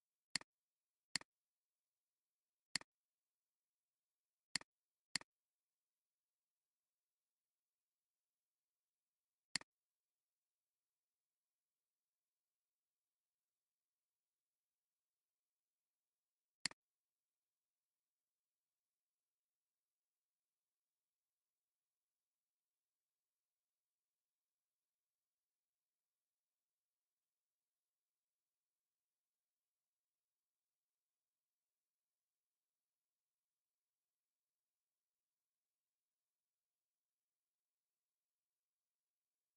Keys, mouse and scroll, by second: 0.2 space, 2.7 right click, 4.6 right click, 6.1 ctrl+z, 16.6-17.9 drag.